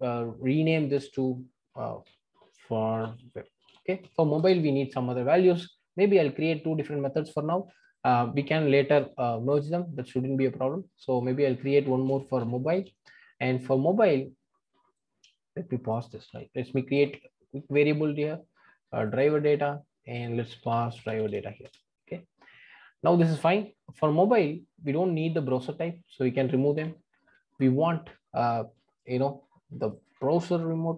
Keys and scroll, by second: 0.8 shift+F6, 7.6 super+c, 10.3 super+v, 16.2 alt+Return, 17.0 alt+Return, 21.6 Return.